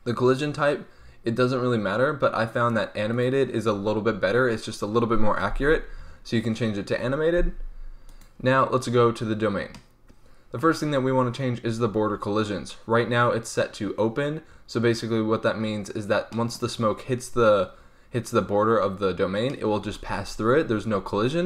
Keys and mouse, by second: 5.9-8.0 middle drag, 8.0-9.7 right drag, 9.7-15.9 middle drag.